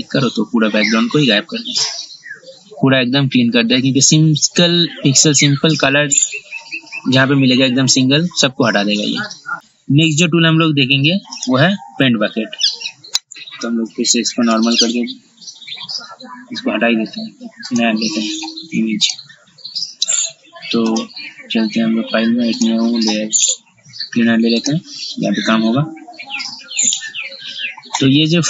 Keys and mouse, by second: 13.9 ctrl+z, 14.1 ctrl+z, 14.3 ctrl+z, 14.5 ctrl+z, 14.8 ctrl+z, 15.0 ctrl+z, 17.9 click.